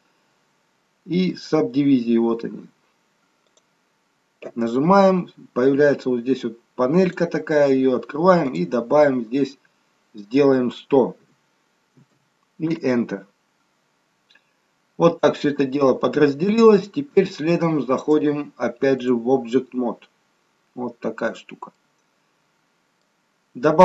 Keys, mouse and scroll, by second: 7.0 click, 12.1 0, 15.1-15.6 scroll up 1, 15.6-16.1 scroll down 1, 16.1-17.0 scroll down 1, 18.1 click, 19.8-20.3 scroll up 1, 20.3-20.7 scroll down 1, 20.7-21.6 scroll down 2, 21.8 middle click.